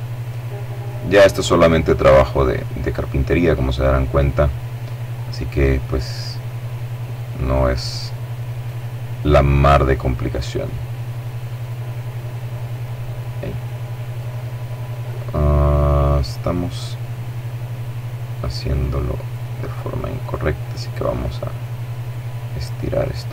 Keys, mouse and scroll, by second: 1.0-3.5 drag, 5.5-8.2 right drag, 7.5 click, 9.2-11.0 drag, 10.4 right click, 11.7-13.6 drag, 14.4-15.0 scroll down 2, 16.3-18.7 right drag, 19.1 click, 19.9-22.9 right drag, 22.3 middle click.